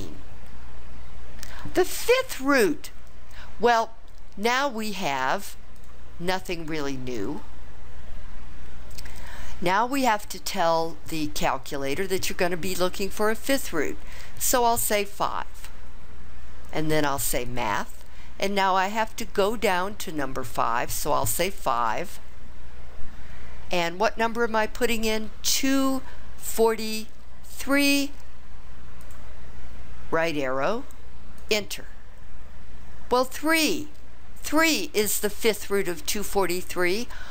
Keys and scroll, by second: 15.1 5, 21.8 5, 25.6 2, 26.5 4, 27.5 3, 29.0 ), 31.4 Return.